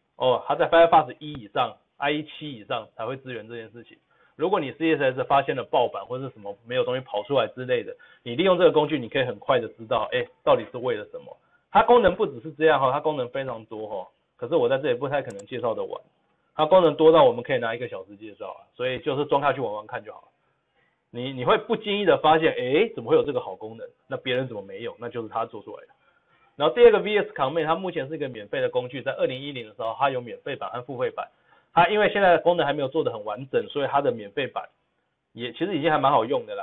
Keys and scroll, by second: 10.6 ctrl+v, 10.6 ctrl+z.